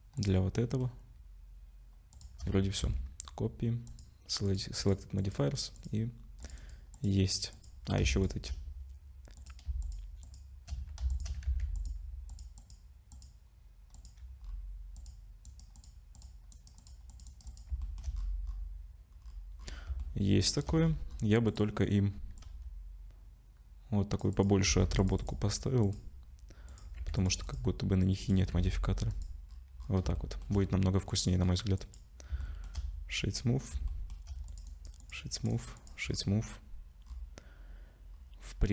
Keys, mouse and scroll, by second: 0.2 shift+click, 0.6 shift+middle click, 2.1 shift+click, 2.8 ctrl+c, 5.7 click, 6.4 click, 6.6 right click, 7.5 click, 8.1 shift+click, 8.2 shift+click, 9.3 click, 9.8 shift+click, 10.2 shift+click, 11.2 shift+click, 11.4 ctrl+c, 13.9 click, 14.4-15.0 scroll up 3, 15.0 click, 15.4 right click, 16.1 click, 16.5 right click, 17.1 click, 17.3 right click, 17.8 shift+middle click, 18.2-18.9 scroll up 7, 19.1-19.9 scroll down 10, 20.0 shift+middle click, 20.8-21.3 scroll up 5, 21.5 click, 22.4 click, 24.6 click, 26.7 click, 27.4 click, 28.2 click, 29.4-30.1 scroll down 9, 30.1 shift+middle click, 31.1 click, 31.3 right click, 32.4 shift+middle click, 33.1-33.7 scroll down 3, 33.9 shift+middle click, 34.5 click, 34.7 right click, 35.3 click, 35.5 right click, 36.1 scroll up 5, 37.0-37.5 scroll down 4, 38.1-38.5 scroll down 3, 38.6 click.